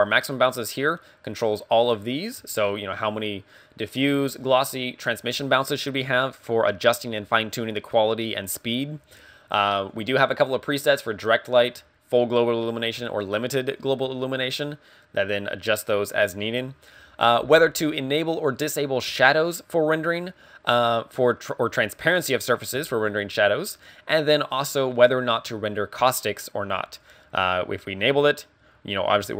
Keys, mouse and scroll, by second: 9.8 click, 27.3 click.